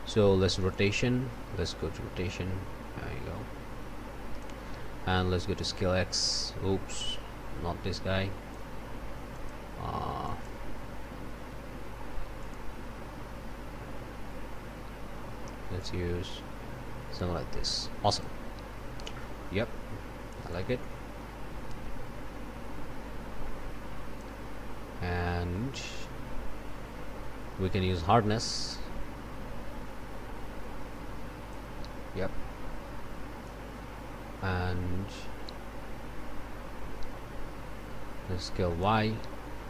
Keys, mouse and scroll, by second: 0.7-4.6 drag, 5.7-8.7 drag, 9.3 click, 10.2 click, 10.9 scroll up 1, 11.6 scroll down 1, 12.4 click, 12.8 scroll up 1, 13.5 scroll down 1, 14.2 scroll down 1, 15.8-18.4 drag, 20.5-24.4 drag, 28.3-31.7 drag, 35.4-39.0 drag.